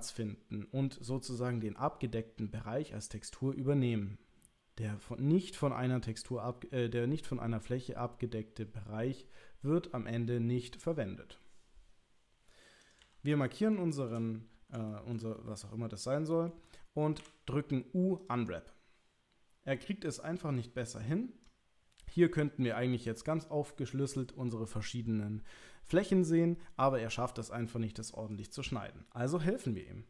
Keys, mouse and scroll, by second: 12.8 click, 13.0 l, 13.7 shift+middle click, 14.9 shift+middle click, 15.3-16.5 middle drag, 17.2 u, 20.6-21.5 drag, 28.3 click, 28.7 middle click, 29.8 shift+middle click.